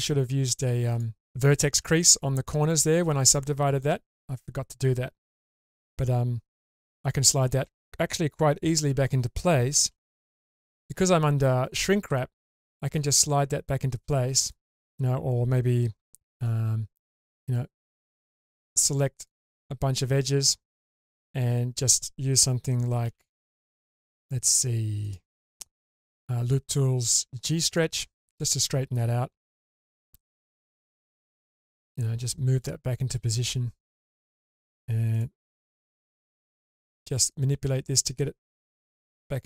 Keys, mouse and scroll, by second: 0.9 ctrl+click, 10.0 1, 10.7 click, 13.0 click, 16.4 2, 18.0 click, 19.2 ctrl+click, 23.0 n, 25.0 click, 27.6 click, 29.4-30.8 drag, 32.6 click, 33.0 click, 35.1 click, 35.7 1, 36.4 click, 37.3 click, 37.5 click.